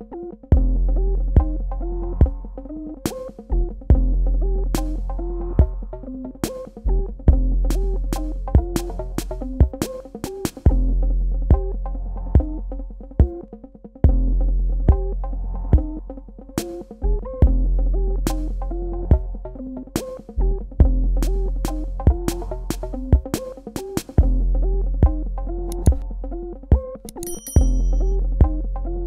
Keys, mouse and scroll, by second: 1.0 super+KP_Subtract, 3.1 click, 4.6-5.8 scroll down 1, 6.0 click, 11.4 super+KP_Add, 14.3 super+KP_Subtract, 15.5 click, 16.6 space, 17.0 ctrl+alt+click, 21.0 right click, 22.0 click.